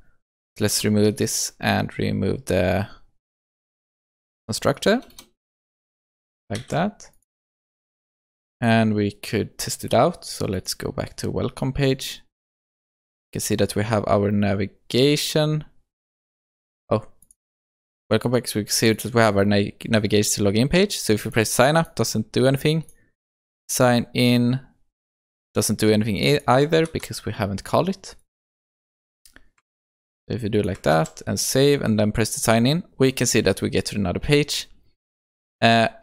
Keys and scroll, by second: 6.7 ctrl+s, 8.6 shift+F10, 10.6 ctrl+shift+F12, 26.9 ctrl+c, 29.7 ctrl+v, 30.9 ctrl+v, 31.0 ctrl+s.